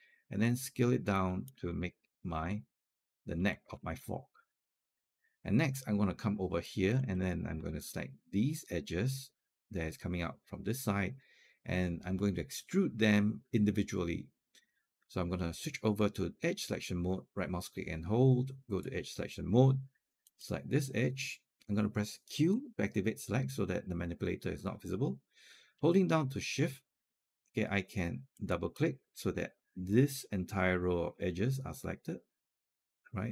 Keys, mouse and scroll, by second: 1.5 alt+click, 2.7 alt+click, 3.5-3.8 scroll down 2, 4.8 alt+middle click, 6.4-8.6 alt+drag, 16.0-19.6 right drag, 20.1 click, 22.3 q, 28.2 shift+click, 28.4 shift+click.